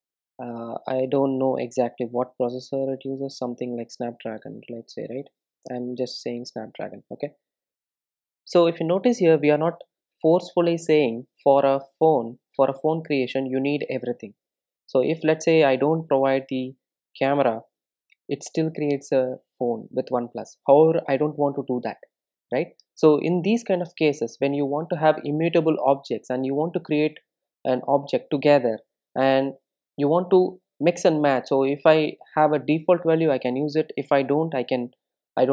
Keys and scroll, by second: 6.8 super+s.